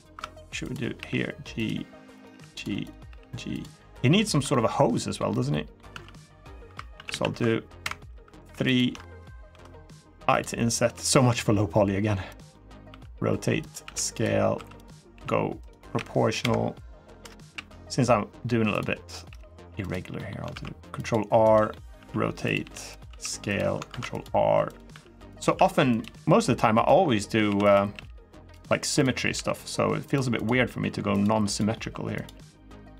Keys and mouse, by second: 0.4 click, 0.7 g, 1.3 click, 2.1 g, 2.3 click, 2.6 click, 2.8 g, 3.3 click, 3.5 middle click, 4.1 3, 4.3 middle click, 4.7 middle click, 5.2 middle click, 5.7 ctrl+r, 7.9 3, 8.5 alt+shift+click, 9.3 i, 10.1 click, 10.6 s, 12.0 click, 12.3 middle click, 12.6-15.7 typing, 13.4 click, 13.9 click, 14.6 click, 15.4 click, 17.2 f, 17.3 g, 18.5 click, 19.0 g, 19.6 click, 19.9 middle click, 20.3 ctrl+r, 21.2 click, 21.5 middle click, 21.7 r, 22.2 click, 22.4 g, 22.7 click, 22.8 s, 23.2 click, 23.6 ctrl+r, 24.4 click, 24.7 r, 25.0 click, 25.2 s, 25.6 click, 25.8 g, 26.5 click, 27.2 1, 27.7 g, 28.3 click, 29.1 g, 29.8 click, 30.2 click, 30.8 g, 30.9 click, 31.3 click, 31.6 g, 31.9 click, 32.1 middle click, 32.7 middle click.